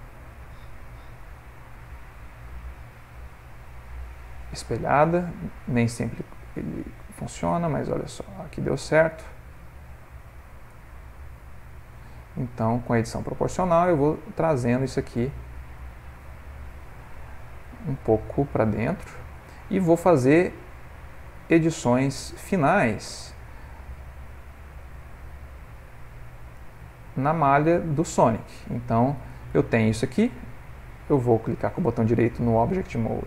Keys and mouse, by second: 1.2 ctrl+z, 2.0 ctrl+z, 4.2 click, 4.6 g, 7.3 click, 7.5 g, 9.1 click, 9.3 g, 10.8 click, 11.0 g, 12.3 click, 12.5 g, 13.9 click, 14.1 g, 15.2 middle click, 15.3 middle click, 16.4 click, 21.0 click, 21.7 ctrl+middle click, 22.5 g, 24.0 click, 24.5 g, 26.5 click, 26.8 g, 27.8 middle click, 29.2 Tab, 29.6 ctrl+middle click, 30.0 middle click, 31.3 right click.